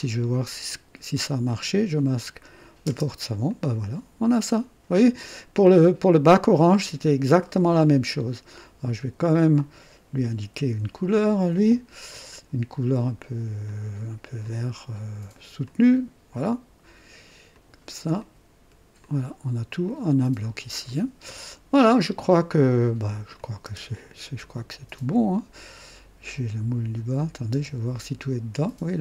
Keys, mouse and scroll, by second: 1.5 click, 2.8 space, 3.5-8.3 drag, 9.5 click, 10.5 ctrl+d, 12.0 click, 13.6 click, 14.4 click, 15.6 click, 17.5 click, 18.2-18.9 drag, 19.0 click, 19.9 click, 20.4 click, 20.9-22.1 drag, 23.3 click, 23.6 space, 23.7 space, 24.4 click, 24.9-26.7 drag, 27.2 click, 27.5 space.